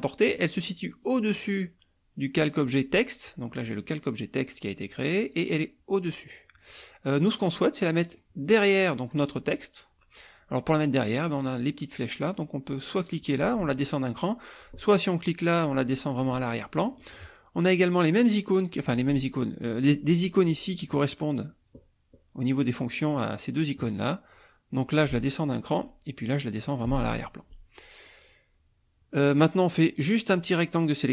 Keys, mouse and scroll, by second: 0.9 click, 7.1-8.3 drag, 25.2 click, 26.6 click, 28.0-29.4 drag.